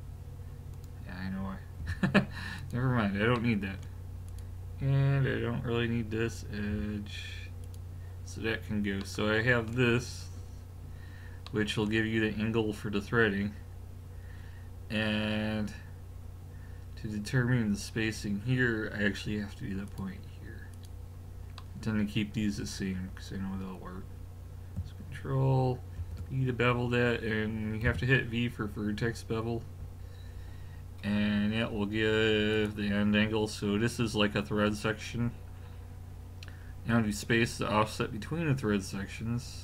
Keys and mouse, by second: 1.8 x, 3.4 middle click, 4.3 click, 6.7 x, 9.1 middle click, 11.6-19.3 middle drag, 19.9-22.6 drag, 26.0 ctrl+b.